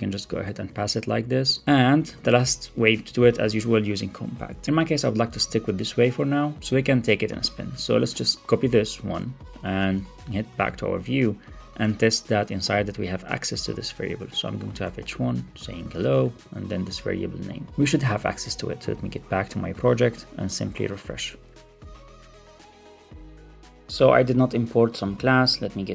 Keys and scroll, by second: 0.1 Left, 0.4 Return, 0.6 super+Right, 0.8 Left, 1.3 Return, 1.6 Up, 1.6 super+Right, 2.1 alt+super+l, 2.2 super+s, 3.0 Left, 3.2 alt+Up, 5.0 Left, 5.2 Down, 5.5 alt+shift+Left, 6.5 Left, 6.7 alt+Up, 8.4 super+c, 9.7 ctrl+Tab, 10.5 ctrl+Tab, 14.0 Return, 14.8 Tab, 16.2 super+v, 16.6 super+s, 17.8 super+s, 20.8 super+r.